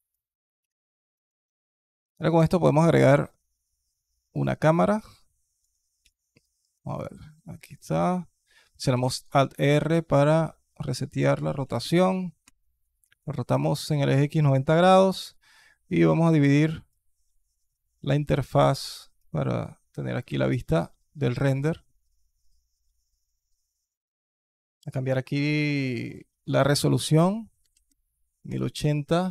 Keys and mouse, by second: 0.5 alt+drag, 0.9 alt+click, 1.7 alt+click, 2.2 shift+a, 4.6-5.4 alt+drag, 5.8 g, 9.0 alt+r, 9.5-10.0 alt+drag, 11.2 r, 14.8 alt+click, 16.7-17.9 drag, 18.6 alt+click, 20.1 KP_0, 24.6 click, 25.8-28.3 drag, 29.2-29.3 drag.